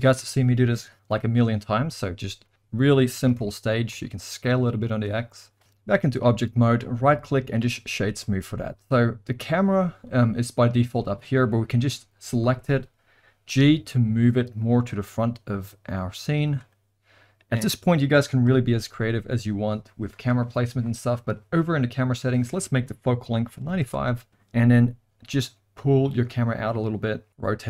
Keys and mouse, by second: 2.4 middle click, 3.1 a, 3.4 s, 5.6 Tab, 6.7-7.7 right drag, 8.3 middle click, 9.5 click, 12.4 KP_7, 13.5 g, 14.9 r, 16.6-17.5 middle drag, 18.4 KP_0, 21.2 click, 22.3-24.3 drag, 25.3 g, 27.3 r.